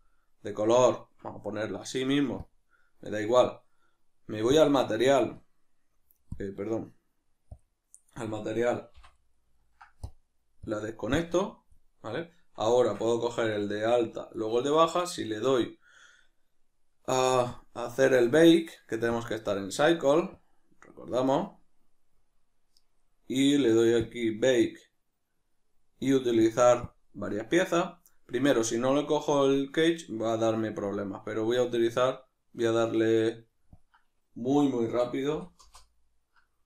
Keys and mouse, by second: 9.1 middle click, 10.1-10.7 drag, 11.1 click, 12.8 Tab, 13.5-17.5 right drag, 17.5-23.5 drag, 23.5 middle click, 24.1 click, 24.5-26.4 middle drag, 26.4 click, 27.2-33.7 middle drag, 33.7-36.4 drag, 35.7 Return, 36.4-36.6 middle drag.